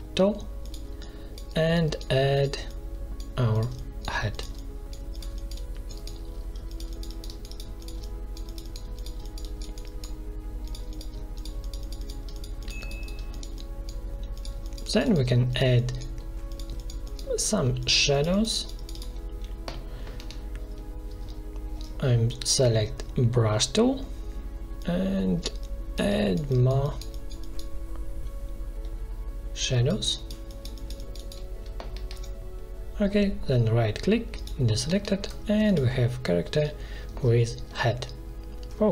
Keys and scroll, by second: 20.1 v, 21.0 b, 31.8 l, 34.8 v, 37.0 ctrl+z.